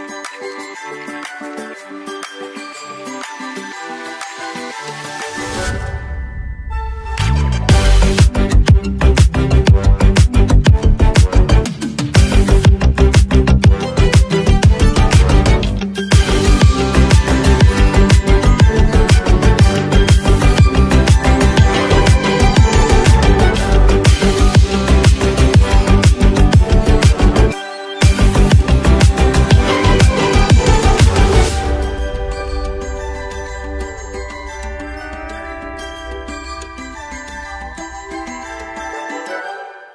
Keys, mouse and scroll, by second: 0.2 space, 0.3 click, 2.0 space, 2.1-4.9 drag, 4.9 space, 5.1 click, 5.4 space, 5.6 click, 6.5 space, 6.6 click, 8.1 space, 8.3 click, 8.6 space, 8.9 click, 9.0 space, 9.3 click, 10.1 space, 10.2-13.5 drag, 13.5-13.8 alt+scroll down 1, 17.8 click, 18.9 ctrl+s, 26.3 click, 29.8 click, 35.0 click.